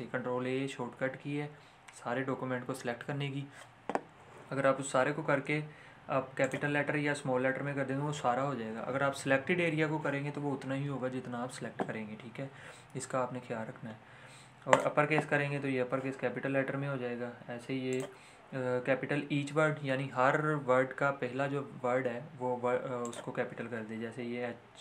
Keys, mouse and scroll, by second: 6.4 click, 14.7 click, 20.0 click, 23.0 click.